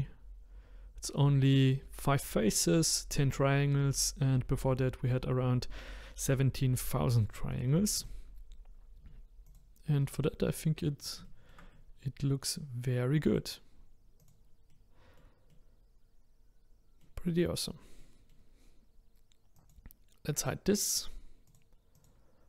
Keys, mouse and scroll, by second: 8.4 click, 9.5 click, 10.0-11.0 middle drag, 11.0 scroll down 1, 11.3-14.2 shift+middle drag, 14.2 click, 14.7-17.3 middle drag, 17.3-18.0 scroll up 2, 18.0-19.5 middle drag, 19.5 click, 21.5 click.